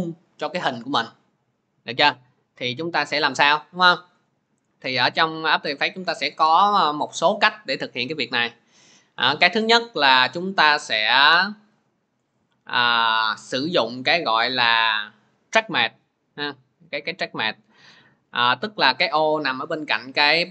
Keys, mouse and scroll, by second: 1.4 click, 3.2 click, 11.7 click, 13.2 click, 18.2 click.